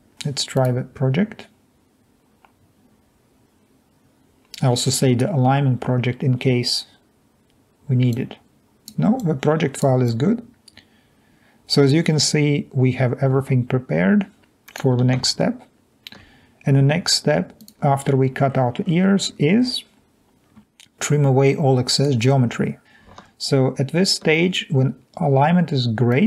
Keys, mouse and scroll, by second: 8.1-8.6 drag, 9.4-9.8 drag, 10.1 drag, 25.0 alt+Tab.